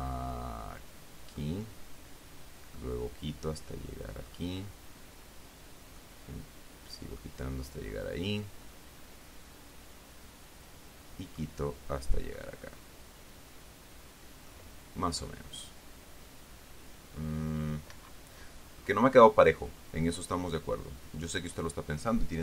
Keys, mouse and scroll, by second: 3.1-4.8 middle drag, 6.3-7.7 middle drag, 9.0-11.9 middle drag, 12.7-15.0 middle drag, 18.2 Escape, 21.5 click.